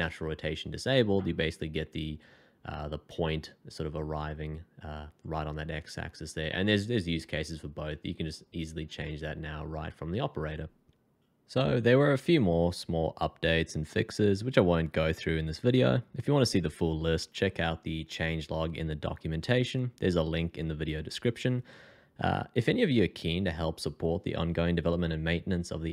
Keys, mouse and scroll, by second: 3.3 middle click.